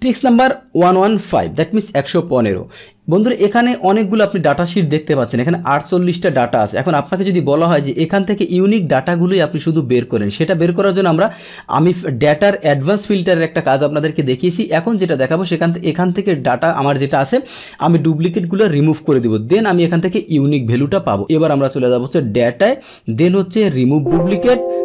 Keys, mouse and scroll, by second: 3.5 click, 7.2-10.7 drag, 13.9 middle click, 21.7 click, 23.8 click.